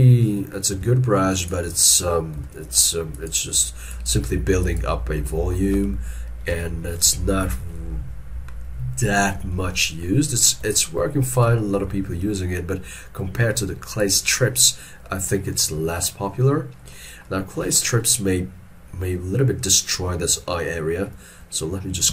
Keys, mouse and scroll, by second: 0.8 f, 1.9 shift+middle click, 2.5 shift+middle click, 5.3 middle click, 6.6 ctrl+z, 7.0 ctrl+z, 9.4 ctrl+z, 9.6 shift+middle click, 11.6 shift+middle click, 15.4 middle click.